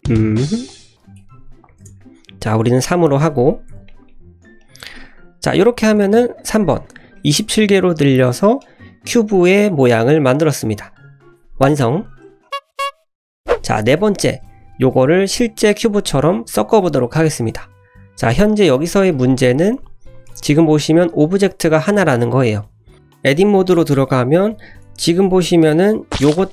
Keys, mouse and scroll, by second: 0.1-0.9 scroll up 1, 0.9-2.2 drag, 2.8 click, 3.0 drag, 3.7 KP_Decimal, 4.0 middle drag, 4.5-4.8 scroll down 2, 4.8 middle drag, 5.9 click, 7.1-8.5 middle drag, 14.3 scroll down 1, 14.4 middle drag, 14.9-15.3 scroll up 1, 17.6 click, 18.1 click, 20.1 click, 21.1 click, 22.4 click, 22.9 click, 24.1 Tab, 24.4-24.7 scroll up 2, 24.8 shift+middle click, 25.1 middle click, 25.5 middle click, 26.3 click.